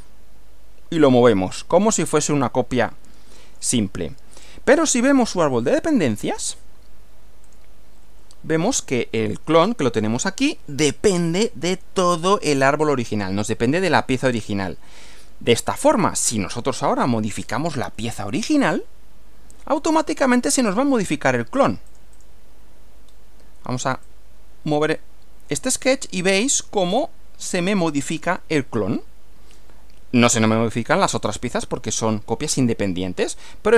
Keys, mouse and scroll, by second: 1.7 click, 2.8-3.8 shift+middle drag, 5.7 click, 7.5 click, 15.5 click, 16.5 middle click, 17.5 click, 18.0 middle click, 20.9 click, 21.9 click, 23.1 scroll down 1, 24.0 click, 25.8 click.